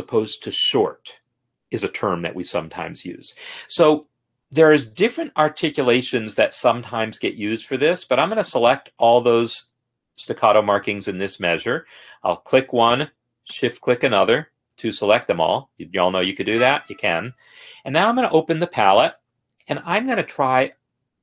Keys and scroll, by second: 14.9 BackSpace, 19.5 F9.